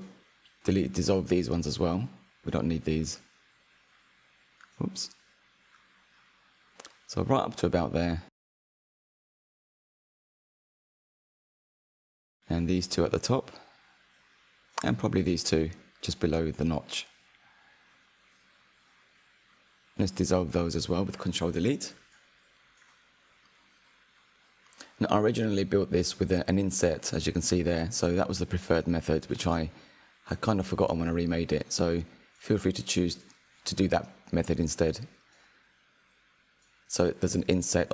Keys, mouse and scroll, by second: 1.2 click, 2.5 shift+click, 2.9 shift+click, 3.4 shift+click, 3.8 shift+click, 4.4 shift+click, 4.8 shift+click, 5.6 shift+click, 6.2 shift+click, 6.6 shift+click, 7.1 shift+click, 7.6 shift+click, 8.5-11.5 middle drag, 12.7 shift+click, 13.0-14.1 middle drag, 14.1 shift+click, 14.4-15.9 middle drag, 15.9 shift+click, 16.5 shift+click, 16.9-19.7 middle drag, 19.7 ctrl+Delete, 20.8-22.0 middle drag, 22.0 1, 22.5 click, 23.0-25.4 middle drag, 25.4 shift+click, 28.2 j, 28.7 click, 29.2 shift+click, 30.1 j, 30.5-32.6 middle drag, 32.6-33.4 scroll up 2, 33.4 click, 34.0 shift+click, 35.1 j, 35.8 click, 36.2 shift+click, 37.1 j, 37.6 Tab.